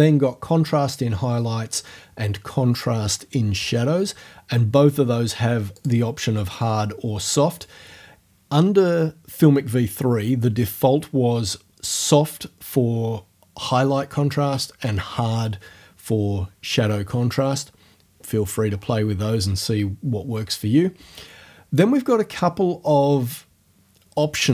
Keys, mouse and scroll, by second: 5.8 click, 7.5 click.